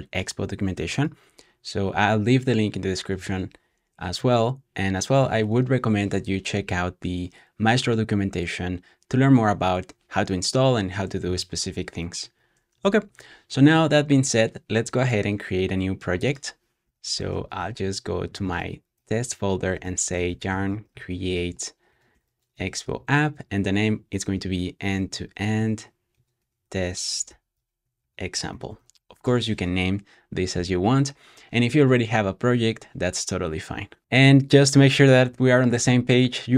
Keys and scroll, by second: 4.1 shift+super+], 13.0 shift+super+[, 16.7-29.4 typing, 33.8-34.5 typing.